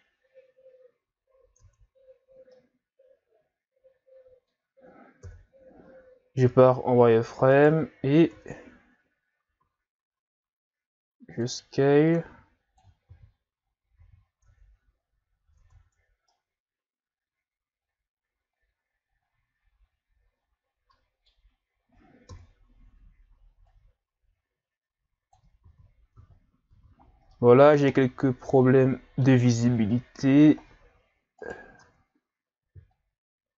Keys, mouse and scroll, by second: 1.6 Tab, 2.3-2.6 scroll down 1, 2.6-5.2 middle drag, 5.2 KP_3, 6.0-6.5 scroll up 1, 6.5 z, 7.0-7.6 scroll up 1, 7.6 right click, 8.3 Tab, 9.7 s, 12.1 click, 13.1 ctrl+z, 14.1 z, 14.5 Tab, 15.6 Tab, 16.3-19.3 middle drag, 22.3 KP_3, 23.7 click, 25.6 ctrl+z, 26.2 Tab, 26.7 a, 27.0-27.4 scroll down 3, 27.4-29.6 middle drag, 29.6 ctrl+KP_3, 30.6-31.4 scroll up 1, 31.4 right click, 31.8 Tab, 32.9 click.